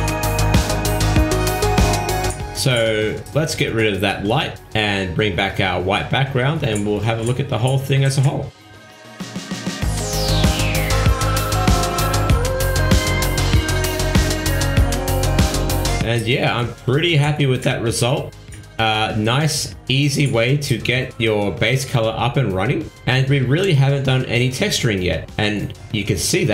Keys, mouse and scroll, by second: 7.2 x, 8.6 click, 14.8 scroll down 4, 15.4-16.4 scroll down 14, 17.0 shift+middle click, 19.6 ctrl+s.